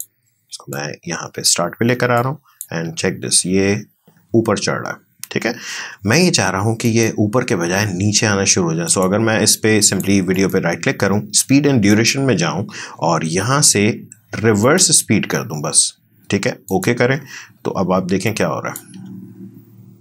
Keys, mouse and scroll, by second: 2.8 space, 5.8 space, 6.9 right click, 8.9 click, 10.4 right click, 11.9 click, 17.2 click, 17.5 click, 19.0 space.